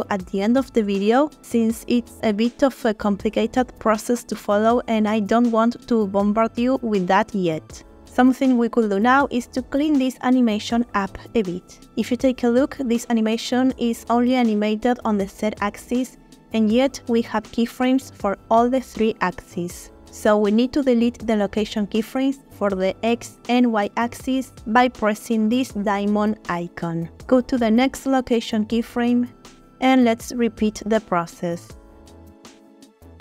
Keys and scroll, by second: 3.0 space, 7.1 space, 13.3 space, 16.6 space, 18.2 space.